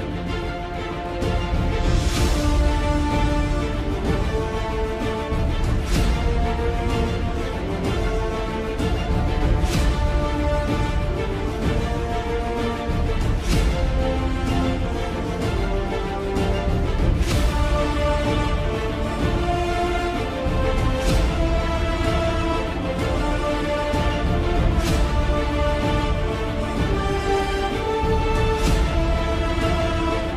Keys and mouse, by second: 2.5 KP_3, 3.6 KP_7, 4.7 KP_3, 6.2 KP_7, 9.0 s, 12.1 e, 14.1 s, 17.0 e, 18.4 s, 20.6 e, 28.9 ctrl+alt+click.